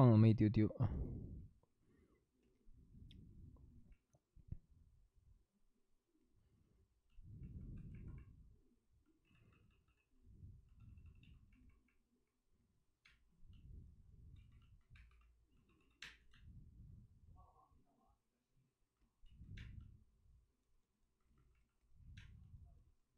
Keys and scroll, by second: 0.1 ctrl+z, 8.9-10.1 typing, 13.0 d, 13.0 space, 14.3 ctrl+z, 14.9 2, 16.0 2, 16.0 space, 19.2 ctrl+z, 19.5 space, 21.6 ctrl+z, 22.1 space.